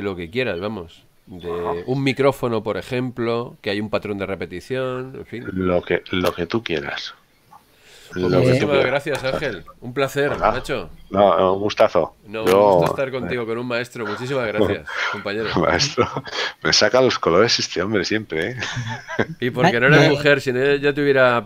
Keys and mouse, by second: 8.3 click, 10.3 click, 13.1 click.